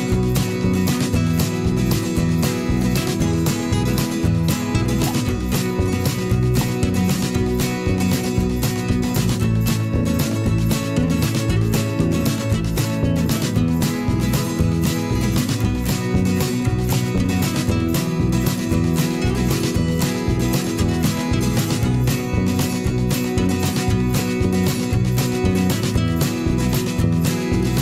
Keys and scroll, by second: 0.0-2.8 typing, 4.2-7.1 typing, 5.5 Return, 8.5 alt+Up, 9.1 shift+Left, 9.6 shift+Up, 9.7 shift+Left, 10.1 shift+Down, 10.3 shift+Left, 12.1 m, 13.8 v, 16.1 Return, 16.6 v, 22.6-24.8 typing, 25.1 ctrl+shift+,, 25.8 alt+Right, 27.5 shift+Left, 27.6 shift+Up.